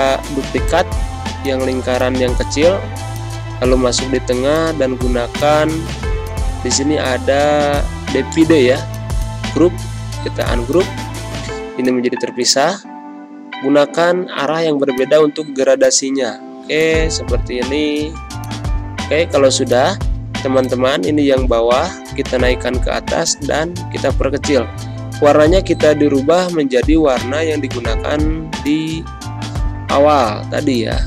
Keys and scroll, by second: 6.3 ctrl+z, 10.0 z, 11.1 g, 15.5 v, 16.2 g, 21.5 ctrl+shift+], 25.0 ctrl+-, 25.6 space, 26.6 i, 28.0 g, 29.8 ctrl+-, 30.4 space.